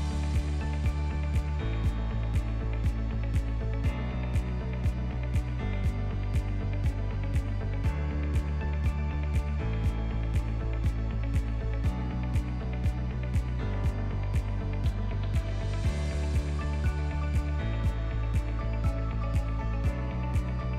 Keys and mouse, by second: 3.5-6.0 middle drag, 6.5-7.2 drag, 7.9 alt+h, 8.5 drag, 9.1 click, 10.4 Delete, 11.4-11.7 ctrl+middle drag, 12.0 middle drag, 12.4 click, 13.8 click, 15.7 ctrl+a, 16.0 ctrl+a, 17.0-17.4 ctrl+middle drag, 17.6-18.2 right drag, 18.6-19.1 ctrl+middle drag, 19.4-20.0 middle drag, 20.0 click, 20.0 right click.